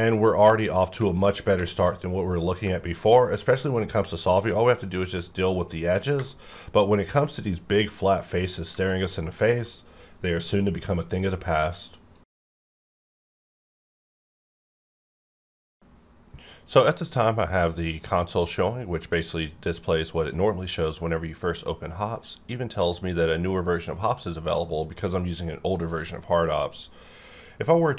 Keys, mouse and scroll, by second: 0.8 scroll down 1, 1.1 shift+middle click, 1.7 shift+middle click, 2.5 scroll down 1, 2.7 shift+middle click, 2.8 shift+middle click, 6.3 shift+middle click, 8.9-9.7 shift+middle drag.